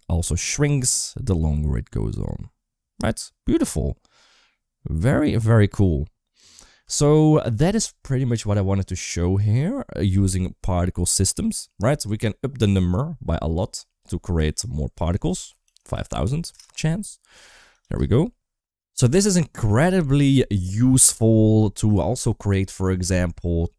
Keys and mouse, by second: 6.7 space, 12.5 click, 13.8 click, 14.9-16.5 drag, 15.9 0, 16.1 0, 17.6 click, 17.9 space.